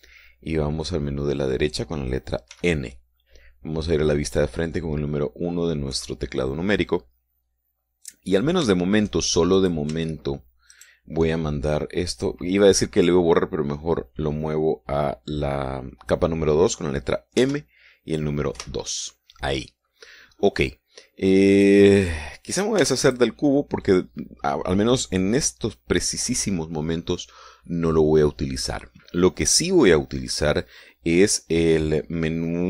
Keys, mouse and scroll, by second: 0.2 t, 3.3 n, 6.7 KP_1, 8.9-9.3 scroll down 2, 10.3 right click, 11.5 shift+right click, 18.1 m, 19.3 2, 21.0 scroll up 2, 22.3 click, 23.5 x, 23.8 click.